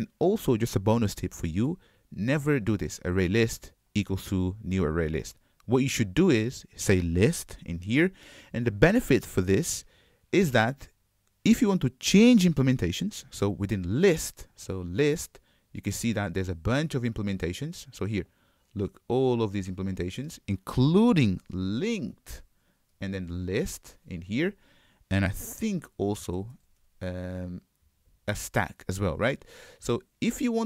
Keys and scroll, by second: 14.7 super+b, 22.0 super+b.